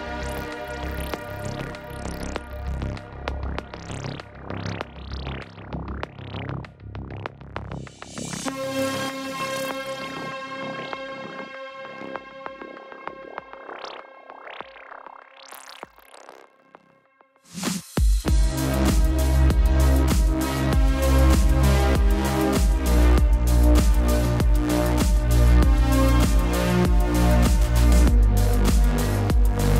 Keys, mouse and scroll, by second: 0.4-1.4 typing, 1.2 click, 1.5 click, 2.4-2.7 typing, 2.8 click, 3.8 typing, 4.1 click, 19.6-20.4 typing, 21.4 click, 23.1 typing, 26.5 click, 26.6 space, 29.5-29.7 typing, 29.5 click.